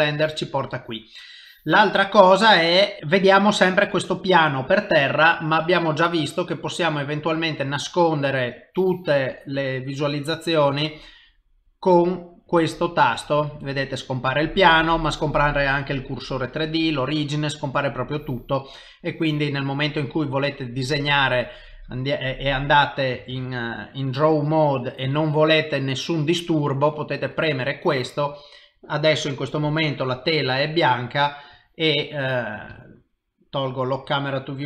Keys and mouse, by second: 2.1 middle click, 8.6 click, 10.8 click, 11.7 click, 12.5 click, 13.3 click, 14.7 click, 17.6 click, 23.2 click, 23.3 ctrl+Tab, 30.8 ctrl+middle click, 32.3 click, 32.8 ctrl+middle click.